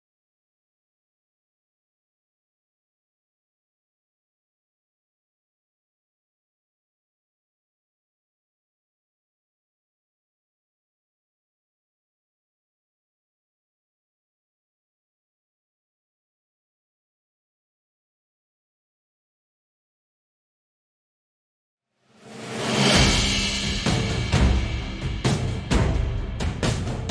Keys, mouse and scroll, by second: 0.6 `, 1.6 Tab, 2.8 click, 3.4 x, 4.2 `, 5.0 shift+a, 5.8-6.2 scroll down 1, 6.2 g, 7.3 click, 8.1 s, 9.8 click, 9.9 s, 10.9 click, 11.0 `, 11.6 s, 12.4 g, 13.0 click, 13.2 s, 14.0 click, 14.3-14.8 scroll up 2, 14.8 click, 15.3 click, 16.1 click, 17.3-18.5 drag, 19.0 click, 19.9 click, 20.5-26.0 drag, 24.9 scroll down 1, 26.5 click.